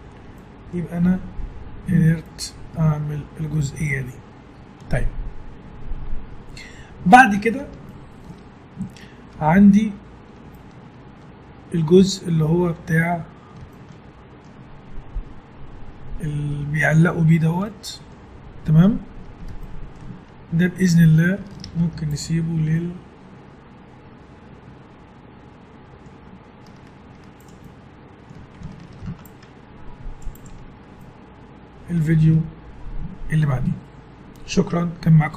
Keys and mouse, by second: 0.2-4.2 middle drag, 6.9-12.6 middle drag, 13.7-15.7 middle drag, 17.6-24.0 middle drag, 21.6 ctrl+s, 27.1 Tab, 28.9 ctrl+r, 30.4 Tab, 30.9 middle click, 31.9 middle click, 32.2 middle click.